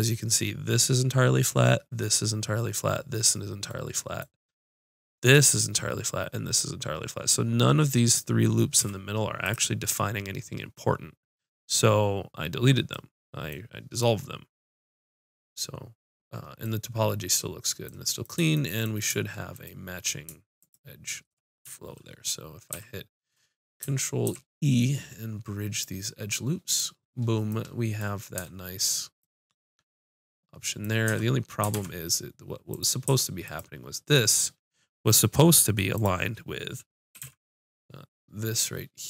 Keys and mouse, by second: 4.0-8.7 middle drag, 8.7 x, 14.8 middle click, 16.2 middle click, 16.8 middle click, 19.5-22.5 drag, 22.7 ctrl+f, 24.2 ctrl+e, 28.3 Tab, 31.0 Tab, 31.7 ctrl+Tab, 37.1 g.